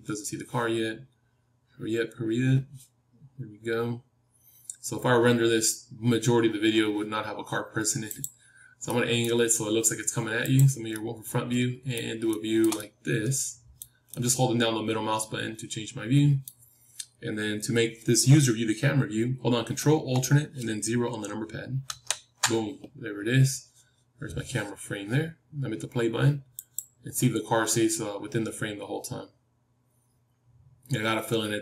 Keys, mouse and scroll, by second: 8.6-12.7 drag, 8.8-10.9 middle drag, 12.7-16.0 middle drag, 21.8 ctrl+alt+KP_0, 26.5-31.6 drag.